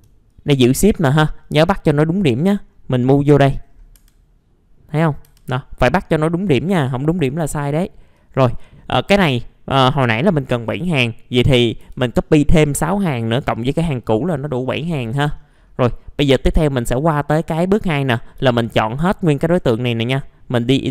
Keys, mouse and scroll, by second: 0.3 shift+click, 1.1 scroll down 1, 1.6 scroll down 1, 2.2-2.5 scroll up 1, 3.9 F3, 8.1 click, 11.8 KP_6, 13.4 click, 14.3-14.7 scroll down 1, 15.8 middle click, 16.2 click, 18.1 scroll up 1, 19.5 right click, 20.6 click.